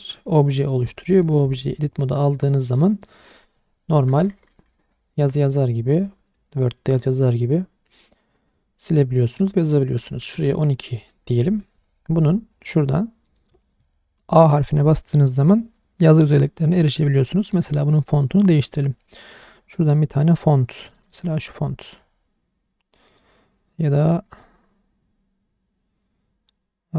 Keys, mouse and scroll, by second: 2.0 click, 4.1 BackSpace, 4.3 BackSpace, 4.4 BackSpace, 4.6 BackSpace, 10.2 KP_1, 10.3 KP_2, 11.5 Tab, 13.2 click, 17.4 click, 18.5 click, 23.0 click.